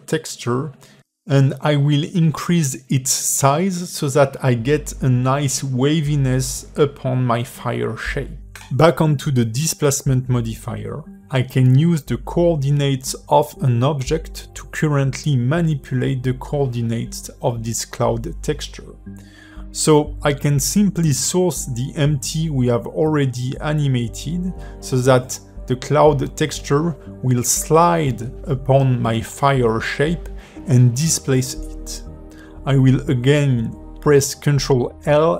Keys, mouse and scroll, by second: 0.1 click, 2.8 middle click, 6.2 click, 16.0 click, 17.6 click, 17.9 click, 20.2 click, 22.0 middle click, 22.5 space, 23.5 alt+middle click, 28.6 space, 29.8 ", 32.1 click, 34.4 ctrl+l.